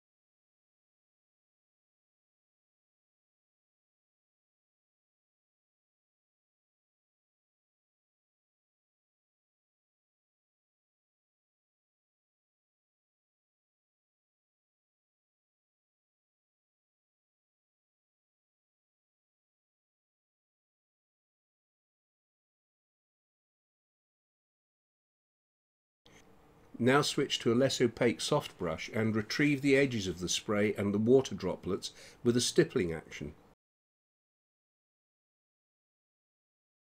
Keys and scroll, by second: 0.9 [, 1.5 space, 2.3 [, 3.5 space, 4.1 [, 5.6 space, 7.8 ], 11.3 space, 13.4 space, 15.4 space, 16.1 [, 17.4 space, 19.1 space, 22.9 ].